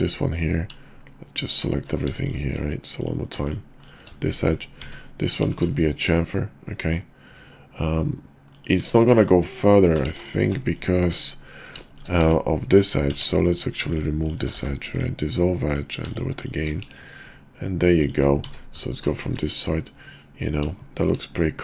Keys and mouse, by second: 0.2 click, 1.4 shift+click, 2.2 shift+click, 2.9 click, 3.4 shift+click, 3.8 shift+click, 4.4 middle click, 5.3 ctrl+b, 9.1 middle click, 10.1 ctrl+z, 10.5 click, 11.0 Tab, 11.8 shift+click, 12.2 Tab, 12.6 click, 13.1 Tab, 13.5 click, 14.2 shift+click, 14.5 x, 15.6 click, 16.4 shift+click, 16.8 ctrl+b, 18.5 `, 19.2 shift+click, 21.0 shift+click.